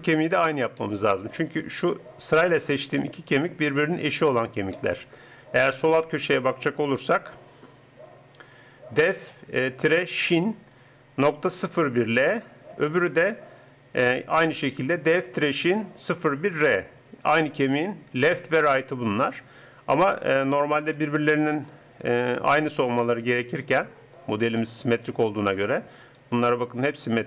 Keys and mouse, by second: 0.8 middle click, 12.9-14.8 drag, 18.3-27.2 drag.